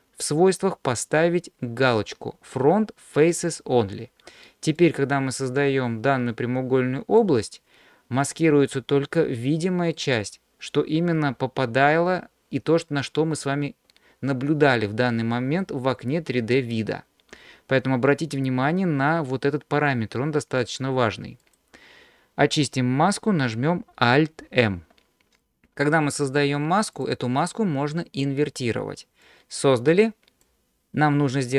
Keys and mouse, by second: 3.5 click, 4.8-7.3 drag, 10.0-15.6 middle drag, 21.4 click, 24.5 alt+m, 26.9 click, 29.2-30.5 drag.